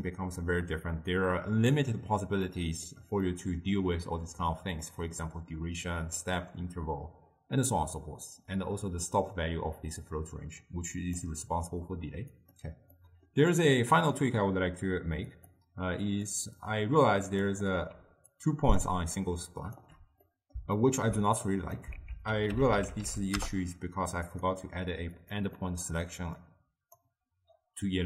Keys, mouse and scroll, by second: 2.6-8.0 middle drag, 11.1 click, 12.5 click, 13.1-15.5 middle drag, 15.5-18.1 drag, 18.1 d, 18.5 click, 19.0-19.3 d, 19.3 click, 19.9 d, 20.0 d, 20.4-21.6 middle drag, 21.6 click, 22.1 ctrl+a, 25.3-25.7 drag, 25.7-26.5 middle drag, 26.5-28.0 drag.